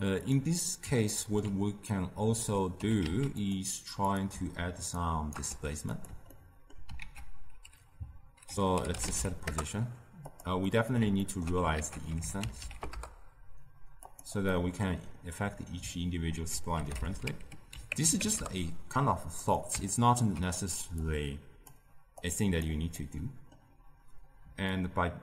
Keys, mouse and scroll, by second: 0.5-1.9 middle drag, 1.9 click, 2.7 g, 4.0 click, 4.9 shift+right click, 5.4 g, 6.2 ctrl+middle click, 6.9 ctrl+a, 10.5 middle click, 11.1 ctrl+middle click, 11.6 ctrl+a, 14.4-16.2 middle drag, 16.2 ctrl+a, 19.8-20.9 ctrl+middle drag, 20.9-22.9 drag, 22.9-24.6 middle drag, 24.6-25.2 shift+drag.